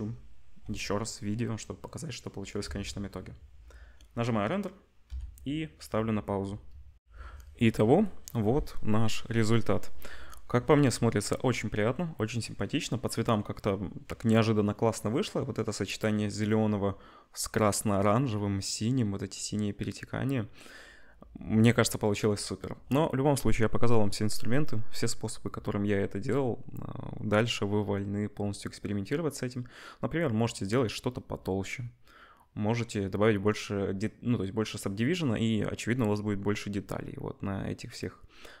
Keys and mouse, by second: 2.6 ctrl+s, 5.2 F12, 20.2-38.6 middle drag.